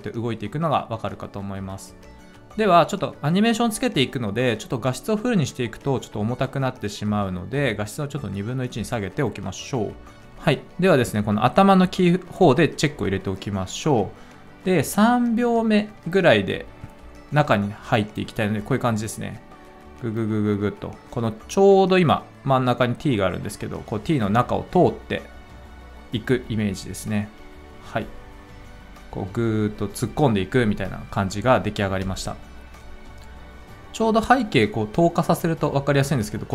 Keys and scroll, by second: 10.1 ctrl+z.